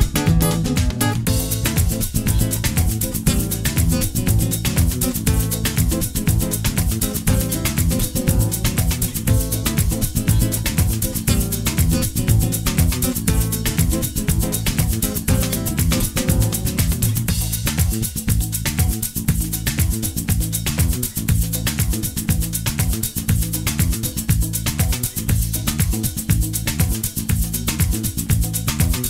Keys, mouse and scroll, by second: 0.2 scroll down 4, 0.4 f, 1.1 s, 3.0 s, 3.8 g, 4.7 scroll up 11, 5.6 g, 7.2 click, 8.0 right click, 9.5 click, 9.9 right click, 10.8 click, 11.3-11.7 scroll down 5, 12.3-13.2 scroll down 5, 13.3 Tab, 13.8-14.4 scroll down 3, 14.5 s, 16.3 s, 17.4-18.3 scroll down 4, 18.3 g, 19.9 s, 22.0 g, 23.6 click, 24.5 space.